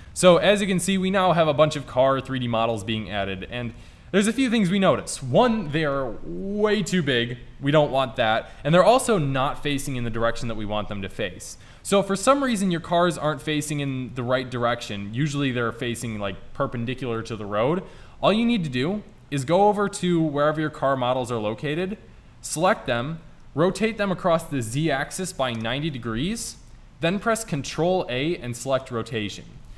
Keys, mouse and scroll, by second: 0.6-2.6 middle drag, 1.2 click, 2.8-3.1 middle drag, 3.3 middle click, 3.4 middle click, 6.4 middle click, 12.1 middle click, 12.3-14.4 middle drag, 18.9-20.5 middle drag, 20.6 click, 20.7-22.1 middle drag, 22.1 right click, 22.3 middle click, 23.8 r, 27.7 ctrl+a.